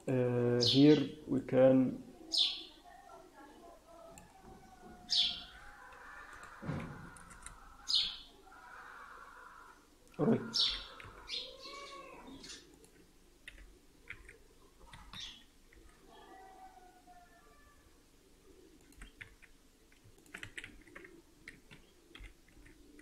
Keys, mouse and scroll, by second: 1.4 click, 4.4-4.9 scroll down 4, 6.3 click, 8.0-8.3 scroll down 3, 8.7-9.3 scroll down 3, 10.5 g, 13.4 r, 15.6 r, 18.9 g, 22.1 g.